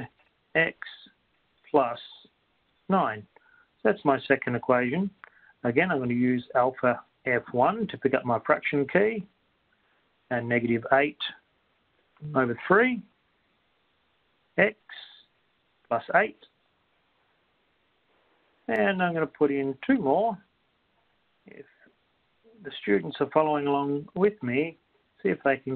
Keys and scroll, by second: 0.7 x, 3.1 9, 4.1 Return, 12.1 Return, 12.5 8, 12.7 Down, 13.1 3, 14.1 Right, 17.7 8, 18.7 Return, 25.0 Return.